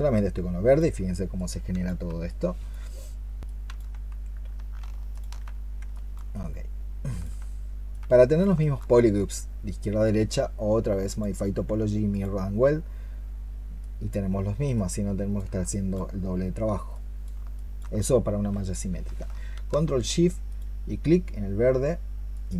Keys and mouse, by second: 5.0 ctrl+shift+click, 5.8 alt+click, 8.4 alt+click, 15.5 alt+click, 17.4 alt+click, 20.3 ctrl+shift+click, 22.2 ctrl+shift+click.